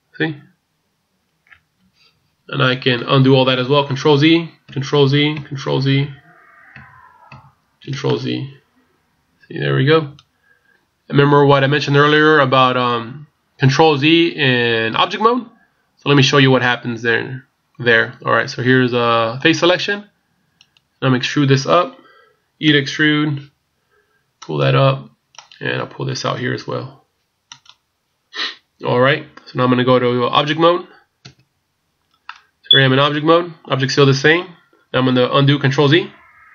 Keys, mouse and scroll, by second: 4.0 ctrl+z, 4.8 ctrl+z, 8.1 middle click, 12.2 middle click, 19.4 click, 20.7 right click, 22.7 e, 25.4 right click, 26.4 e, 31.3 Tab, 32.2 middle click, 36.3 ctrl+z.